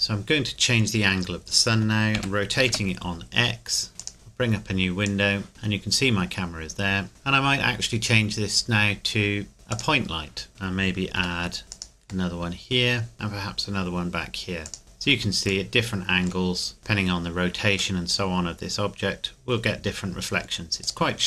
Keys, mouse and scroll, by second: 0.0-1.2 scroll up 1, 1.2-2.2 scroll down 1, 2.2 r, 2.7 x, 4.0 click, 7.1 click, 9.7 click, 11.2 shift+d, 11.7 click, 12.3 middle click, 13.1 shift+d, 14.7 click, 14.8 middle click, 16.0 shift+middle click, 16.6 scroll up 2, 16.8 middle click, 17.2-18.0 scroll down 2, 18.3-19.0 middle drag, 20.8 right click.